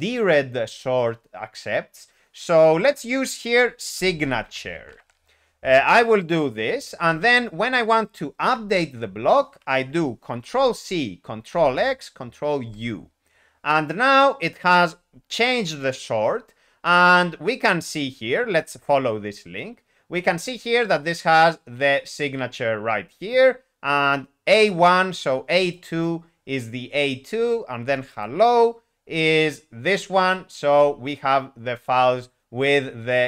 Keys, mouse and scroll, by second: 3.8 typing, 12.6 ctrl+u, 14.8 Escape, 25.7 shift+n.